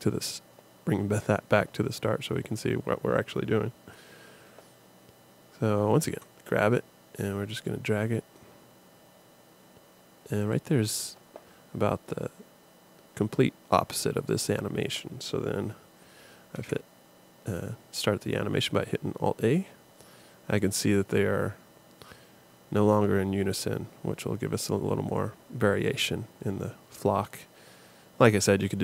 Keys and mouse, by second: 6.2 g, 16.5 alt+a.